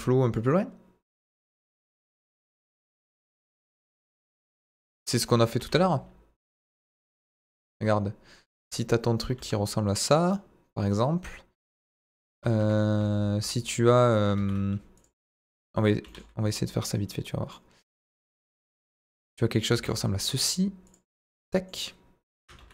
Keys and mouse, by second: 4.9 middle drag, 5.5 shift+a, 7.1 middle drag, 8.6 KP_1, 9.3 middle click, 9.3 s, 10.0 drag, 10.3-11.0 middle drag, 12.5 KP_1, 12.9 z, 14.4 shift+a, 16.0 g, 16.0 middle click, 16.5 click, 17.5-18.1 middle drag, 18.5-18.9 middle drag, 19.2 middle drag, 19.7 s, 19.7 middle click, 20.8 click, 21.2 middle click, 22.6 ctrl+a.